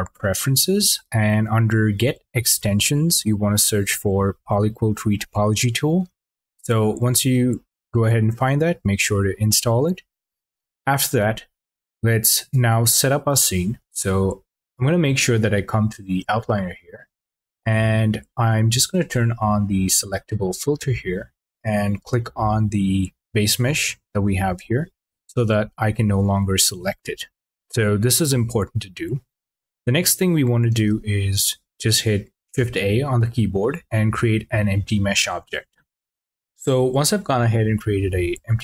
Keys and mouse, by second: 17.3-20.5 drag, 23.5 click, 25.0 click, 31.1 shift+a.